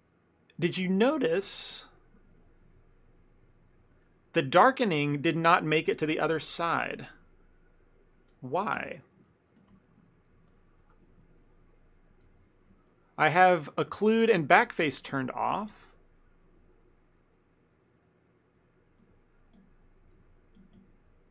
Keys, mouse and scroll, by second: 0.1 ctrl+middle click, 0.6 middle click, 1.0 middle click, 1.1 ctrl+middle click, 1.5 ctrl+middle click, 1.7 middle click, 2.1 middle click, 4.1 ctrl+middle click, 4.6 shift+middle click, 4.7-7.4 shift+middle click, 5.7 ctrl+middle click, 6.0 middle click, 6.4 middle click, 7.0 shift+middle click, 7.1 shift+middle click, 7.3 middle click, 8.8 KP_1, 9.6 f, 9.9 shift+middle click, 10.1 shift+middle click, 10.2 ctrl+middle click, 10.6 click, 11.3 middle click, 12.4 ctrl+z, 12.9 click, 17.8 middle click, 18.7 middle click, 19.1 click, 19.6 click, 20.2 shift+f, 20.8 click.